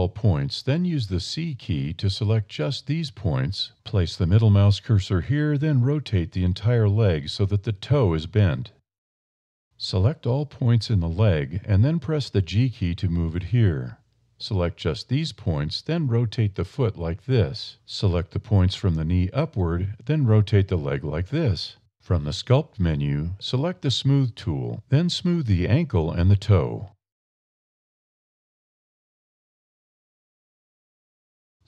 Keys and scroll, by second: 1.2 c, 4.0 r, 7.5 a, 10.1 a, 10.9 1, 11.3 g, 12.7 a, 13.0 c, 15.9 r, 18.5 a, 18.6 c, 20.8 r, 22.9 a, 23.5 d, 23.6 e, 25.0 e, 29.1 1, 31.4 s.